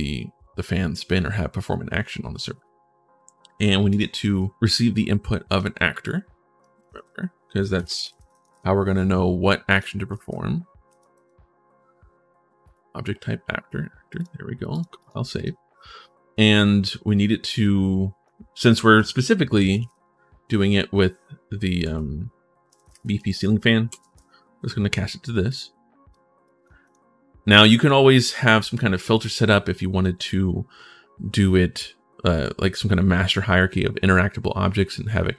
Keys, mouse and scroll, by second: 3.6 click, 5.2 click, 5.8-8.5 typing, 6.4 click, 9.5 click, 9.7-10.9 typing, 12.4 click, 14.0 click, 14.5 click, 14.8 click, 15.1 click, 17.4 click, 19.0-19.9 typing, 21.6 space, 23.8 e, 25.3 click, 25.9 click, 26.6 click.